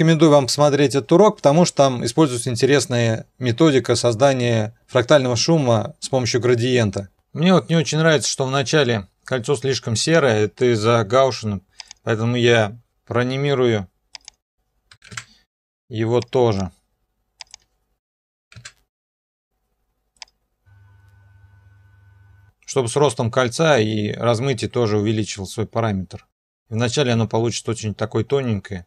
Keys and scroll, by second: 12.9 u, 14.7-15.5 typing, 18.0-18.9 typing.